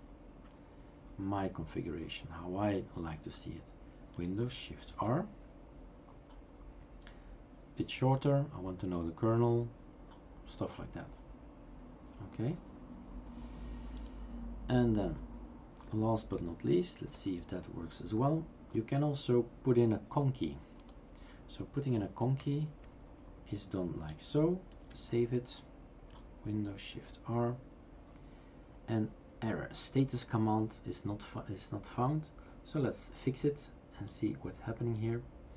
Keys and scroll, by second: 4.9 shift+super+r, 17.0 #, 22.4 BackSpace, 24.8 ctrl+s, 27.0 shift+super+r.